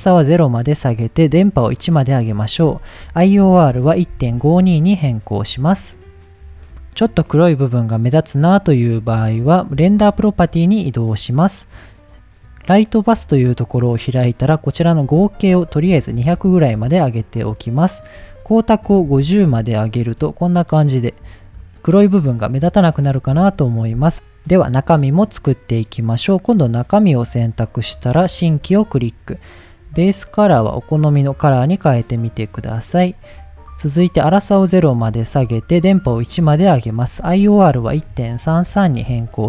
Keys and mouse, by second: 0.0 click, 1.8 click, 2.6-5.2 drag, 10.0 click, 12.8 click, 15.0-17.7 drag, 16.4 KP_0, 18.0-20.2 drag, 23.8 click, 25.7 click, 26.2 click, 27.6 click, 28.5 click, 29.5 drag, 33.2 drag, 34.4 click, 36.2-36.5 drag, 36.9-39.4 drag, 38.6 KP_3.